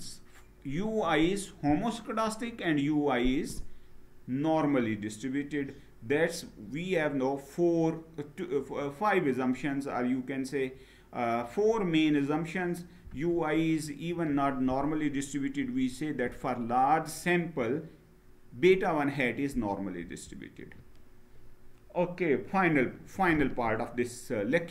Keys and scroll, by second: 19.7 Down.